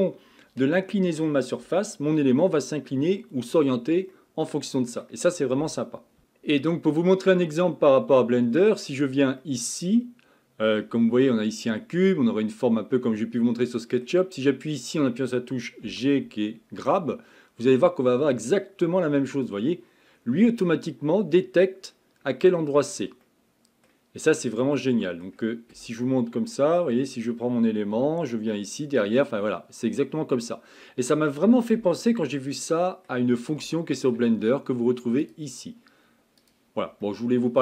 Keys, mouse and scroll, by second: 7.4-15.2 middle drag, 26.0-28.0 middle drag, 32.2-35.2 middle drag, 35.2-36.6 drag, 37.0-37.6 middle drag.